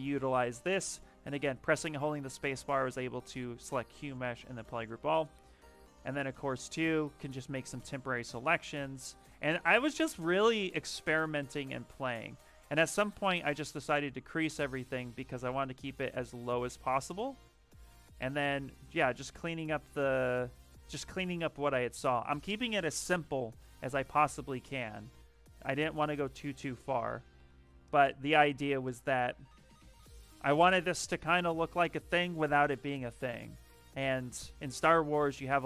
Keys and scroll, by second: 1.2 space, 5.4 ctrl+shift+z, 7.2 ctrl+shift+z, 7.6 ctrl+shift+z, 7.9 ctrl+shift+z, 8.2 ctrl+shift+z, 8.7 ctrl+shift+z, 9.1 ctrl+shift+z, 9.5 ctrl+shift+z, 9.8 ctrl+shift+z, 10.2 ctrl+shift+z, 10.6 ctrl+shift+z, 10.9 ctrl+shift+z, 11.5 ctrl+shift+z, 11.9 ctrl+shift+z, 12.1 ctrl+shift+z, 12.3 ctrl+shift+z, 14.6 ctrl+shift+z, 14.8 ctrl+shift+z, 15.0 ctrl+shift+z, 15.1 ctrl+shift+z, 15.3 ctrl+shift+z, 15.5 ctrl+shift+z, 15.7 ctrl+shift+z, 15.9 ctrl+shift+z, 16.9 ctrl+shift+z, 17.1 ctrl+shift+z, 17.5 ctrl+shift+z, 17.7 ctrl+shift+z, 18.7 ctrl+shift+z, 18.9 ctrl+shift+z, 19.1 ctrl+shift+z, 19.2 ctrl+shift+z, 19.4 ctrl+shift+z, 19.6 ctrl+shift+z, 19.8 ctrl+shift+z, 23.6 ctrl+shift+z, 23.9 ctrl+shift+z, 24.6 f, 25.4 ctrl+shift+z, 25.6 ctrl+shift+z, 25.8 ctrl+shift+z, 26.0 ctrl+shift+z, 26.1 ctrl+shift+z, 26.3 ctrl+shift+z, 26.4 ctrl+shift+z, 26.6 ctrl+shift+z, 26.7 ctrl+shift+z, 26.9 ctrl+shift+z, 27.1 ctrl+shift+z.